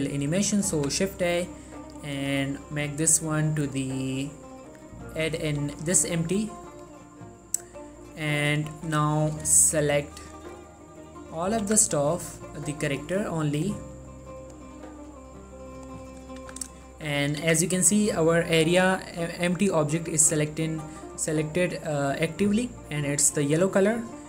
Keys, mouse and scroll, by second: 0.1 middle click, 0.9 shift+a, 5.3 click, 5.7 g, 6.0 right click, 6.4 s, 6.9 click, 7.2-8.8 middle drag, 10.3 shift+click, 11.6 shift+middle click, 11.8 z, 12.1 scroll down 1, 12.3-13.0 scroll up 1, 13.0 shift+click, 14.1 shift+middle click, 14.3 shift+scroll up 1, 14.5 shift+click, 15.0 shift+middle click, 15.7 shift+click, 16.3 middle click, 16.6 z, 16.9 shift+middle click, 17.6 z.